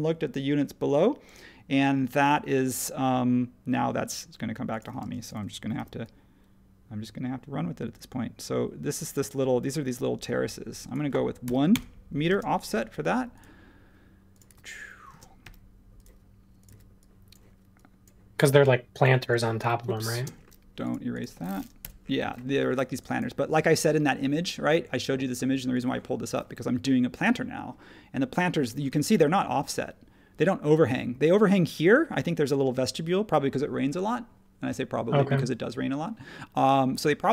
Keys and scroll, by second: 5.0 space, 5.7 f, 11.4 1, 11.7 Return, 12.3 space, 14.5 e, 15.1 space, 16.7 e, 19.9 super+z, 21.8 BackSpace, 22.6 e.